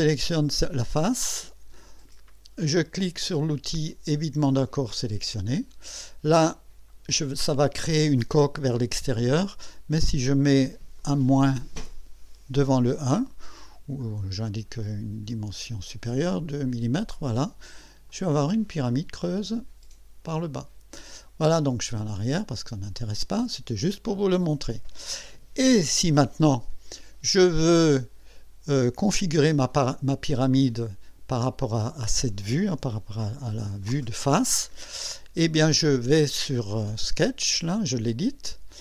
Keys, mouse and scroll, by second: 4.7 click, 6.6 scroll up 2, 7.2-9.6 drag, 11.0 click, 12.5 KP_Subtract, 13.8-15.7 scroll down 8, 16.5 scroll up 2, 18.1 click, 18.9-21.2 drag, 22.5 click, 23.5 scroll down 2, 24.1 click, 25.7-26.9 drag, 29.7-30.4 drag, 32.8 KP_1, 37.7 click.